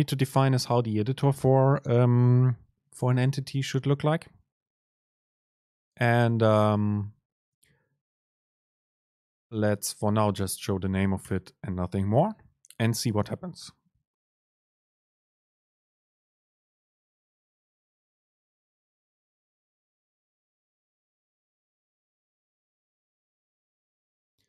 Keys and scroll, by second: 7.7 super+space.